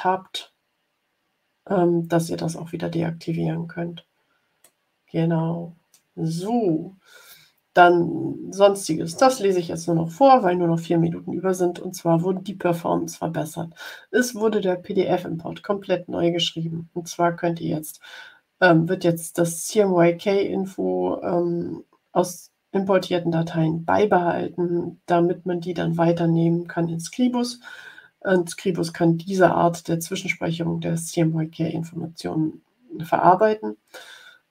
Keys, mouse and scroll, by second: 4.7-6.1 drag.